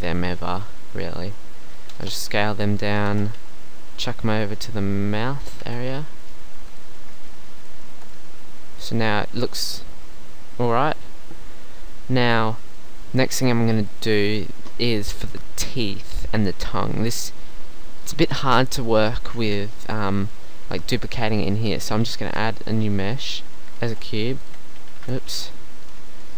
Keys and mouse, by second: 1.9 s, 3.1 shift+Tab, 3.4 g, 5.5-7.2 drag, 5.6 shift+Tab, 7.9 Tab, 12.3 middle click, 13.3-14.8 middle drag, 18.0-20.0 middle drag, 22.1 shift+a, 23.9 g, 25.0 ctrl+z, 25.4 g.